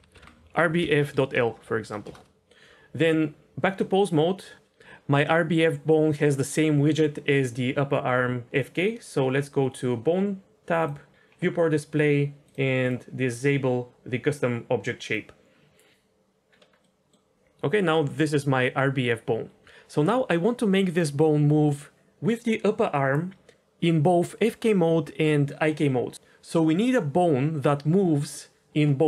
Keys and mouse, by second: 3.0 Tab, 10.7 click, 12.4 click, 12.8 drag, 15.0 click, 16.8 middle drag.